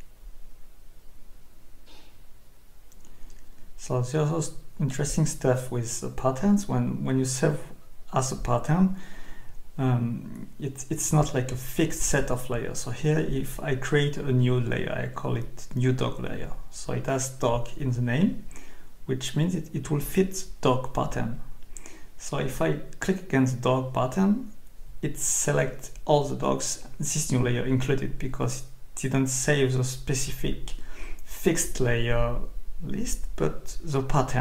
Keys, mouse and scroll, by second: 4.0 Escape, 5.6 scroll down 2, 9.0-9.7 scroll up 2, 10.0 scroll up 2, 13.2 click, 15.3 click, 16.6 Escape, 18.2 click, 19.4 click, 21.6 click, 24.0 click, 26.8 click, 27.9 click, 30.3 click, 31.1 Escape.